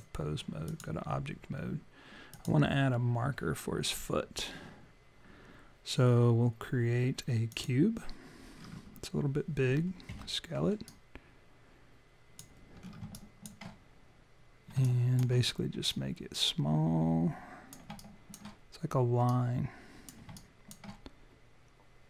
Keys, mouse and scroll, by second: 2.3 click, 8.5-10.1 scroll down 6, 10.1 r, 10.9 click, 12.8-13.2 scroll up 4, 13.2 alt+click, 14.9 alt+click, 15.9 click, 18.0 alt+click, 19.3 click, 20.3 alt+click.